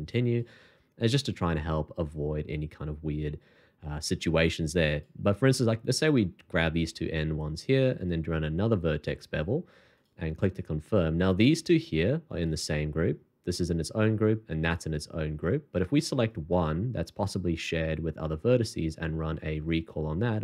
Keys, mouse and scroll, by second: 5.9 shift+click, 6.8 shift+2, 9.9 alt+click, 18.8 shift+2.